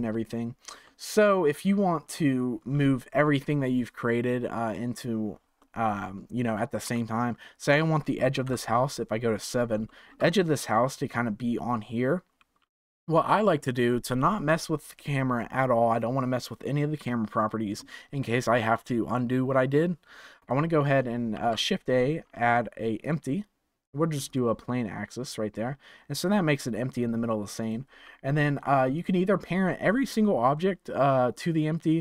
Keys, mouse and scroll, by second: 0.8-3.9 middle drag, 5.6-8.4 middle drag, 8.4 KP_7, 9.2-9.8 scroll up 4, 9.8-12.8 shift+middle drag, 13.4 click, 20.4 click, 21.3 shift+a, 27.5 click, 28.9 click.